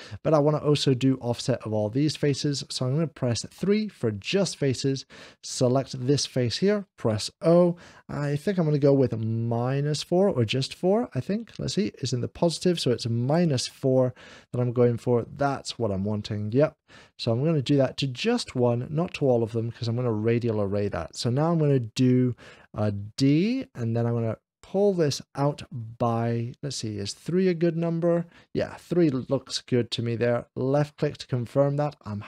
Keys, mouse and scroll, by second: 2.0 click, 3.5 3, 4.6 click, 5.9-6.9 middle drag, 7.4 o, 13.3 3, 13.3 -, 13.6 o, 13.6 4, 16.2-17.2 right drag, 16.5 o, 16.5 -, 16.5 4, 17.5 click, 19.0 right click, 19.6-20.6 middle drag, 23.1 o, 23.1 -, 23.1 4, 23.4 d, 26.9 -, 26.9 4, 26.9 3, 30.6 click, 30.9 4, 30.9 d, 31.7-32.2 middle drag.